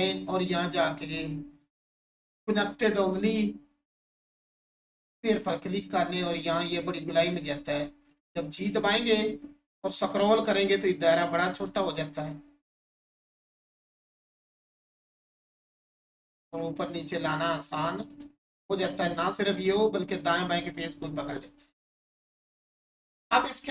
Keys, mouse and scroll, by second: 0.1 click, 4.9 click, 8.2 right click, 9.2-9.6 scroll up 1, 12.6 right click, 13.9-14.2 scroll up 1, 16.9 click, 20.4 click, 20.8-21.2 scroll down 1, 21.8 Tab.